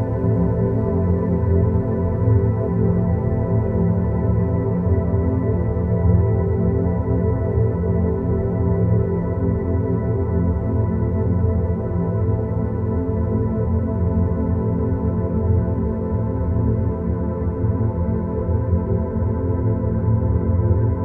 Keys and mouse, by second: 2.0 ctrl+shift+KP_Multiply, 2.6 click, 3.9 ctrl+z, 4.7 ctrl+z, 5.6 click, 7.4 ctrl+click, 12.6 click, 13.5 shift+click, 14.8 ctrl+shift+click, 15.0 ctrl+shift+KP_Subtract, 15.5-16.5 ctrl+drag, 17.2 click, 17.9-18.3 middle drag, 18.5 middle click, 19.1 ctrl+z.